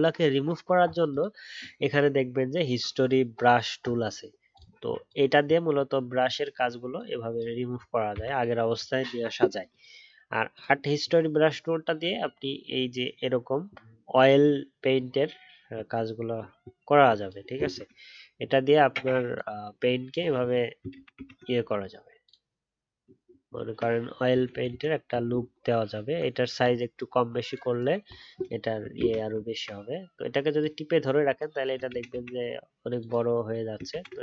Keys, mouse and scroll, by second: 9.0-11.5 alt+scroll up 1, 20.9 alt+scroll, 21.1 ctrl+z, 23.0-23.5 alt+scroll down 1, 28.9 ctrl+z, 29.4 alt+scroll down 1, 31.8 ctrl+z, 32.1 ctrl+z, 33.9 ctrl+z.